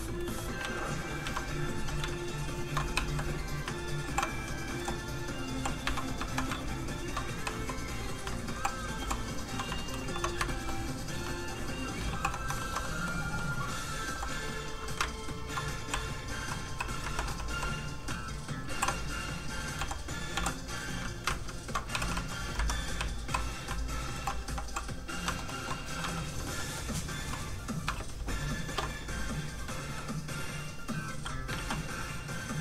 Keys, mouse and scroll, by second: 0.2 shift+middle click, 0.3 middle click, 0.6 alt+z, 2.1 ctrl+shift+click, 2.9 shift+click, 3.0 w, 4.0 alt+m, 4.7 m, 4.8 h, 6.6 ctrl+shift+click, 7.4 shift+click, 7.5 w, 9.0 alt+h, 10.4 shift+middle click, 11.2 alt+middle click, 12.0 alt+m, 12.5 shift+m, 12.6 shift+middle click, 12.8 middle click, 14.1 shift+h, 15.1 ctrl+shift+click, 15.9 shift+click, 16.0 q, 16.7 w, 17.0 Escape, 17.3 w, 18.6 alt+m, 19.8 m, 20.3 h, 21.4 ctrl+shift+click, 21.9 click, 22.0 w, 22.5 Escape, 22.9 w, 24.1 alt+m, 24.6 m, 24.7 h, 25.2 shift+middle click, 27.9 shift+space, 29.6 middle click, 29.7 middle click, 30.7 click, 31.5 ctrl+z.